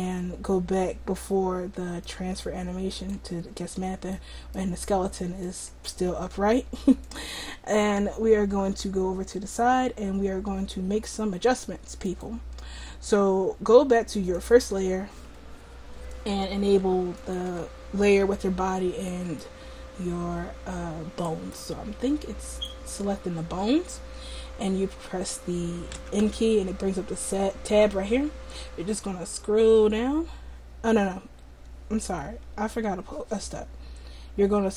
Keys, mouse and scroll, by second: 5.6 right click, 5.8 click, 13.8 click, 14.4-16.1 drag, 17.2-19.3 drag, 25.9 n, 26.2 n.